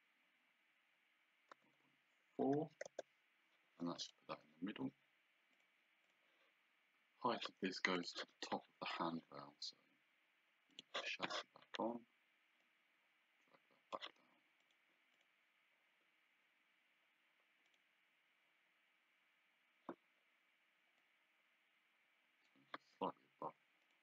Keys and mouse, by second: 1.5 KP_0, 1.8 KP_Decimal, 2.4 KP_4, 2.9 Return, 2.9 KP_Enter, 4.2 Escape, 5.6 click, 8.0 click, 10.7 click, 12.6 click, 14.6 click, 17.7 click, 21.0 click, 22.9 d, 23.8 click.